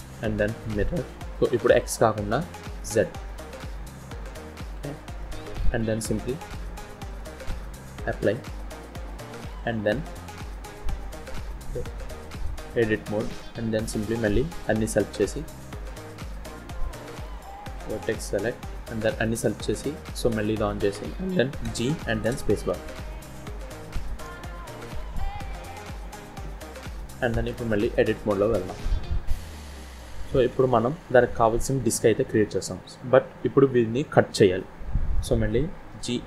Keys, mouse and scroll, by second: 1.3 click, 1.6 click, 2.6 click, 3.3 middle click, 7.0 click, 8.6 middle click, 10.4 Tab, 11.2 middle click, 13.5 scroll up 1, 14.6 a, 18.0 click, 20.0 click, 21.6 g, 22.9 scroll up 2, 23.9 click, 24.9 g, 26.5 scroll down 1, 26.7 middle click, 27.5-27.8 scroll down 1, 27.8 Tab, 28.3 middle click, 30.5 KP_1, 35.8 z.